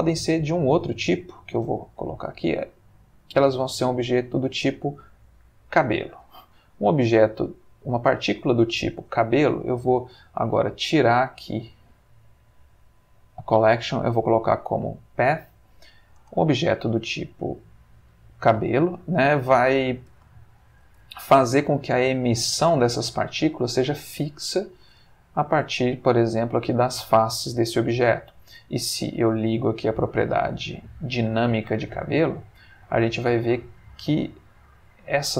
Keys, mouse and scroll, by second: 0.3 Escape, 1.3 click, 4.0 click, 5.0-6.3 middle drag, 6.4 space, 6.9-9.0 middle drag, 9.0 Escape, 9.8 middle click, 10.1 middle click, 10.4 middle click, 11.9 click, 13.9 click, 15.3-16.1 middle drag, 16.2 space, 16.7-21.1 middle drag, 21.2-21.8 ctrl+shift+middle drag, 22.7-24.0 middle drag, 25.3 middle click, 27.7 middle click, 29.6 click, 32.0-33.3 ctrl+middle drag, 33.3-34.3 ctrl+middle drag.